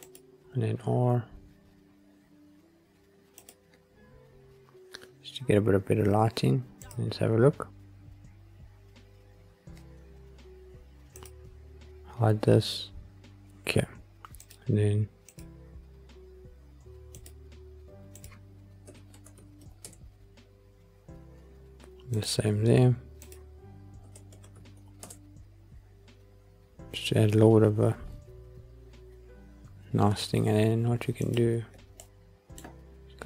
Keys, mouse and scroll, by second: 0.3 r, 3.3 click, 3.8-5.3 scroll up 3, 5.3-6.4 scroll up 2, 8.2 click, 11.0 click, 14.2 click, 15.2-17.1 drag, 18.0-19.8 drag, 22.0 click, 23.1-25.0 drag, 31.2 click, 31.9 middle click.